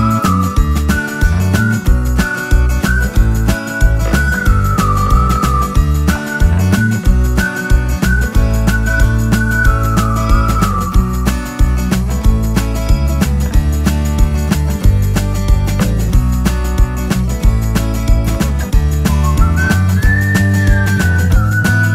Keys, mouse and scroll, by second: 1.7 click, 6.9 Up, 8.3 Right, 12.2 alt+Num_Lock, 12.3-12.6 alt+scroll down 2, 16.8-18.2 scroll up 1, 18.2 click, 20.4-20.9 scroll up 1, 21.0 ctrl+click, 21.4 ctrl+click.